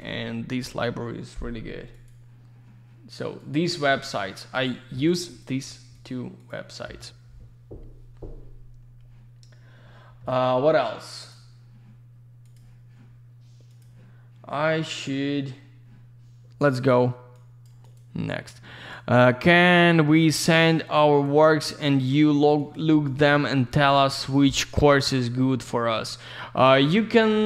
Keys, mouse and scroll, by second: 1.9 click, 3.4 click, 5.3 click, 5.9 click, 11.4 click.